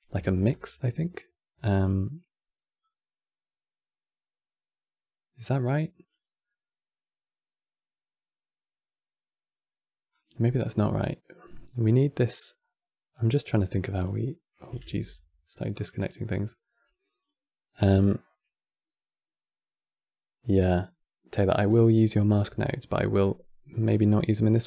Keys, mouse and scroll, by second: 0.2 click, 2.5 click, 9.8 click, 12.1 click, 13.2-14.6 drag, 14.6 ctrl+z, 15.4 click, 15.9-18.9 drag, 20.2 click, 21.6-23.6 middle drag, 23.6 click, 24.5 click.